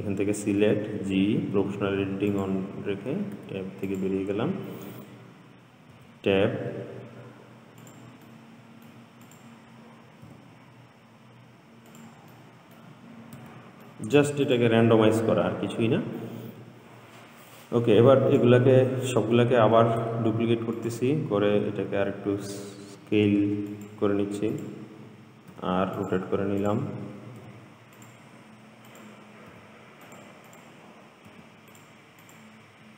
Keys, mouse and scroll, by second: 0.9 g, 3.6 Tab, 4.1 click, 6.1 Tab, 8.0 click, 8.5-9.5 middle drag, 9.5 click, 10.5 g, 12.5-13.6 middle drag, 13.6 Tab, 14.1-14.7 middle drag, 14.7 click, 16.6-17.8 scroll down 2, 17.8 click, 20.0 shift+d, 22.2 s, 24.7 click, 25.7 r, 26.8 click, 27.6 r, 29.1 click, 29.8 r, 30.7 click, 31.5 r, 32.4 click.